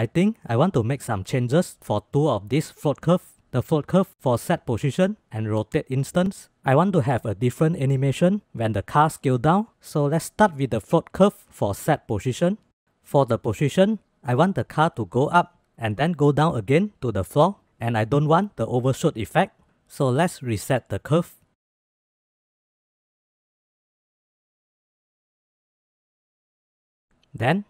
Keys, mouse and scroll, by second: 0.0-0.4 drag, 0.9 middle drag, 1.2 middle click, 9.4 click, 10.2 click, 11.0-11.5 drag, 11.7-13.7 drag, 20.6-21.4 drag, 22.3 click, 23.8 click, 24.6 click, 24.9 drag, 25.1-27.1 typing, 26.1 click, 27.1 click.